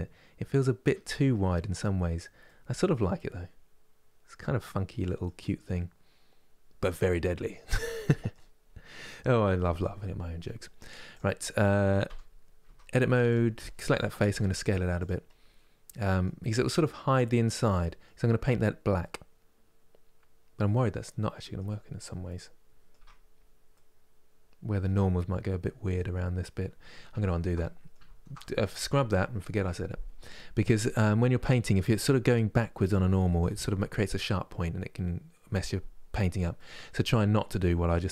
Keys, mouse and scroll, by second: 8.3 scroll up 4, 10.8 click, 11.8 3, 12.4 Tab, 13.0-14.1 drag, 14.1 s, 15.0 scroll down 1, 16.1-21.5 middle drag, 21.5 scroll down 2, 22.0 middle click, 22.7 Tab, 23.0 scroll down 1, 23.4-24.7 middle drag, 24.7 scroll up 1, 25.3-26.9 middle drag, 26.9 ctrl+z, 27.3 middle click, 27.7 ctrl+z, 28.1-31.1 middle drag, 36.3-38.1 middle drag.